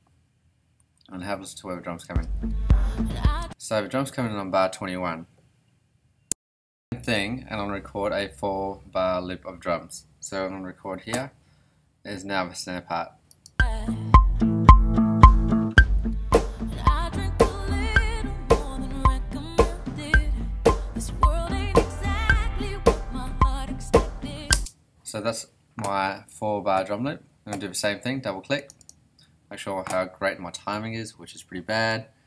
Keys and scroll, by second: 0.8 ,, 2.0 space, 3.4 space, 3.6 ,, 24.5 space.